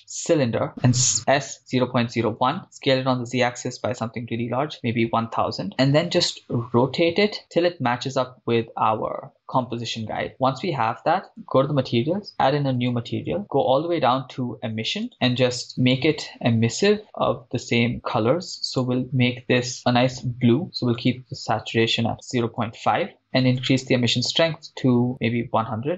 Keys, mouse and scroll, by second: 0.6-4.7 typing, 2.5 Return, 4.8 Return, 6.3 r, 10.3 click, 11.3 click, 13.4 click, 13.4 scroll down 5, 13.9-14.7 scroll down 1, 14.7-15.0 scroll down 2, 15.0-15.7 drag, 24.1-25.1 drag, 25.1 0.